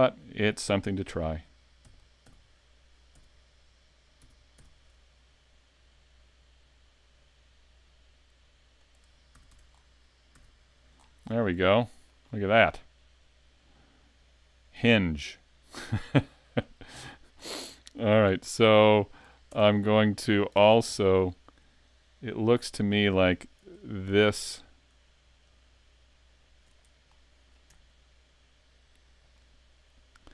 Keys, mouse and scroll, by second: 1.8 e, 2.1 click, 2.2 z, 3.1 z, 4.2 s, 8.9 click, 9.4 a, 9.6 Tab, 9.7 scroll down 5, 10.4 a, 11.0-11.4 scroll down 2, 11.4 middle click, 12.3-12.6 scroll up 6, 12.6 middle click, 17.3-17.7 scroll down 4, 17.8 middle click, 18.2 scroll up 2, 19.2 right click, 19.5 Tab, 20.0 middle click, 20.6 ctrl+Tab, 21.2 scroll up 2, 23.4 right click, 24.4 alt+right click, 25.5 alt+shift+right click, 26.4 alt+right click, 26.8 middle click, 29.4 alt+shift+right click, 30.2 alt+shift+right click.